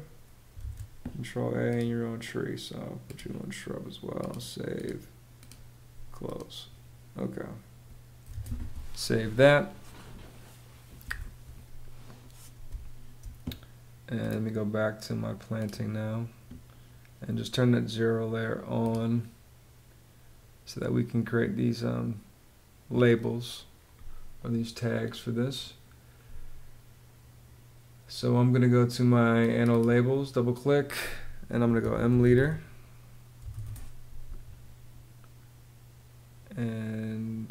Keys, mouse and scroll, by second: 0.2 super+a, 7.9 super+s, 12.4 space, 31.1-33.6 typing, 34.1 Return.